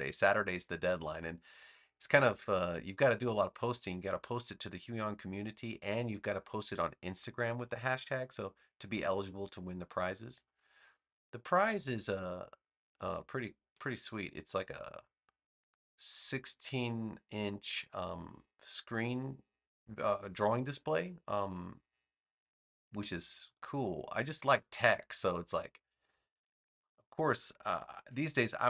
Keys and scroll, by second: 26.2 space.